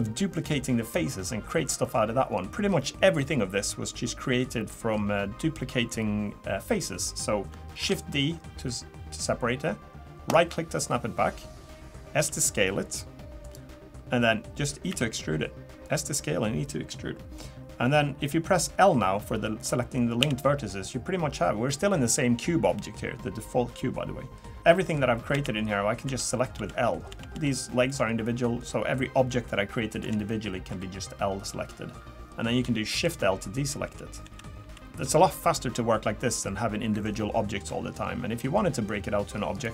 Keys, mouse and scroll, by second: 0.8 click, 7.8 shift+d, 12.2 s, 14.9 e, 20.2 l, 24.6 shift+middle click, 24.6 scroll up 2, 24.7 middle click, 26.0-27.9 typing, 30.0 l, 30.7 l, 33.0 shift+l, 34.2 shift+l, 34.6 shift+l, 39.5 click.